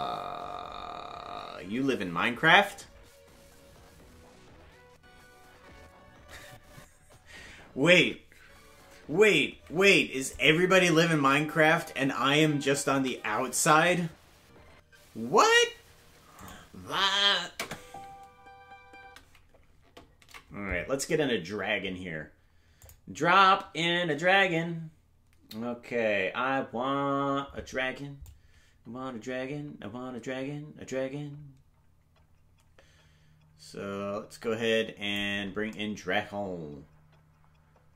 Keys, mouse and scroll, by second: 10.3 click, 10.9 space, 16.4 click, 17.5 space, 22.2 ctrl+s, 22.2 space, 22.8 click, 28.2-35.2 drag.